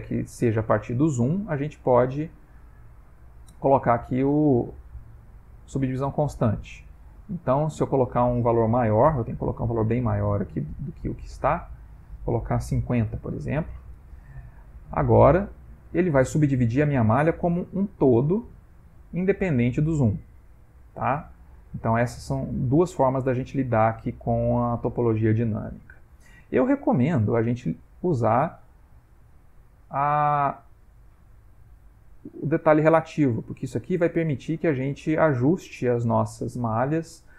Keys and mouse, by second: 1.3 click, 2.4 click, 5.8 click, 9.0 ctrl+z, 10.2 click, 14.7 ctrl+middle click, 15.6 click, 18.7 ctrl+middle click, 19.6 click, 24.8 middle click, 27.5 click, 31.1 click, 33.3 ctrl+middle click, 34.3 click, 35.3 click, 36.5 click.